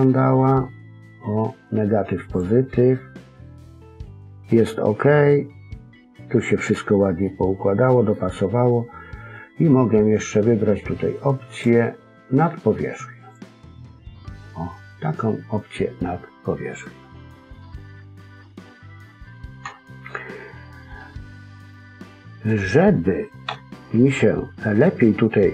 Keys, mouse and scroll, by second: 2.2 click, 3.0-3.4 scroll down 2, 3.4 middle click, 7.2 middle click, 11.4 click, 16.4 middle click, 19.6 KP_3, 20.1 scroll up 2, 21.6 middle click, 21.6-22.6 scroll up 1, 23.4 KP_1, 24.1-24.6 scroll down 3, 24.5-24.9 scroll up 2, 24.9-25.5 scroll down 1.